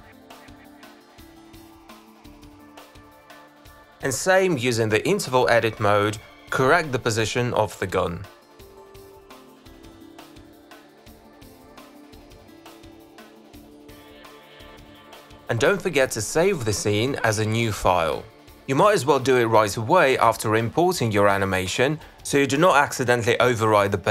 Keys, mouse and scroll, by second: 0.6 click, 0.7 click, 0.9 click, 1.2 click, 1.4 click, 1.5 q, 1.9 shift+click, 2.1 shift+click, 2.2 shift+click, 2.5 alt+click, 2.7 click, 3.2 alt+click, 3.4 click, 3.6 e, 4.2 alt+click, 7.3 alt+click, 7.8 click, 8.5 alt+click, 9.4 click, 9.9 w, 10.5 click, 10.6 e, 11.4 click, 12.3 click, 15.0 click, 16.6 click, 17.6 click, 19.4 click, 19.7-20.4 typing, 21.4 click.